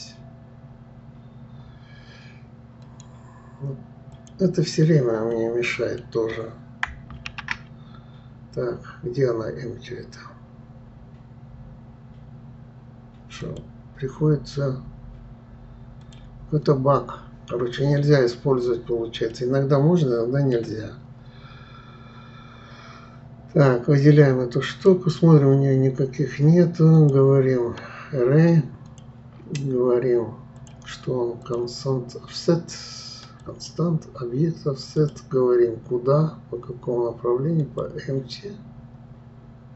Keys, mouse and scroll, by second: 2.8-5.3 right drag, 5.3-7.3 middle drag, 7.3 shift+a, 19.3-22.3 middle drag, 24.7 click, 26.9-30.0 drag, 30.6 click, 31.4 click, 33.4 click, 35.0-38.0 drag.